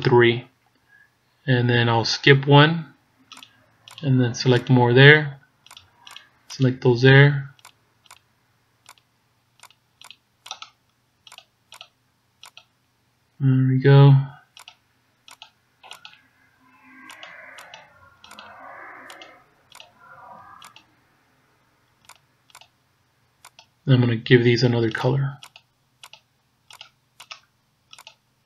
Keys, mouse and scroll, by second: 1.1 shift+right click, 3.4 shift+right click, 3.9 shift+right click, 4.6 shift+right click, 5.8 shift+right click, 6.2 shift+right click, 6.6 shift+right click, 7.7 shift+right click, 15.4 shift+right click, 17.8 shift+right click, 18.3 shift+right click, 19.3 shift+right click, 21.3 shift+right click, 22.1 shift+right click, 22.6 shift+right click, 23.6 shift+right click, 24.9 shift+right click, 25.6 shift+right click.